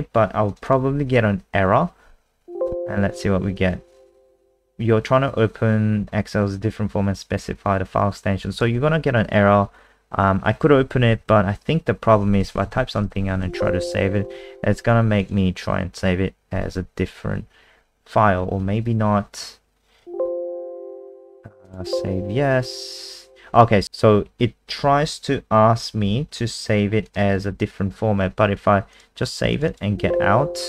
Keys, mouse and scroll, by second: 0.5 click, 0.6 click, 8.5 click, 11.0 Down, 11.1 Down, 12.1-13.3 typing, 13.4 ctrl+s, 15.2 click, 20.0 ctrl+w, 21.6 click, 29.7 click.